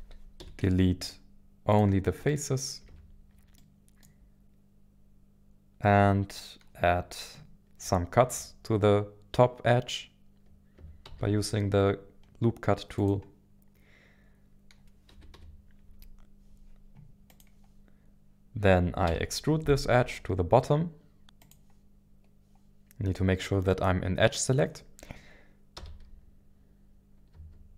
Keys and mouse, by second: 0.4 Delete, 2.3 middle click, 2.9 Tab, 3.6-5.8 middle drag, 5.8 Tab, 5.8 Tab, 11.0 ctrl+r, 15.1 KP_1, 15.3 KP_7, 17.3 click, 19.1 e, 21.4 click, 25.8 e, 27.3 y.